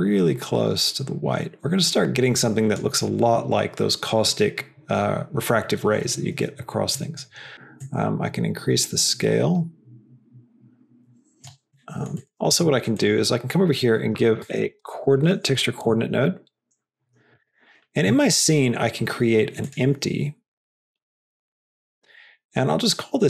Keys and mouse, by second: 6.8 middle click, 7.7-11.4 drag, 11.6 middle click, 12.4 shift+a, 18.1 shift+a.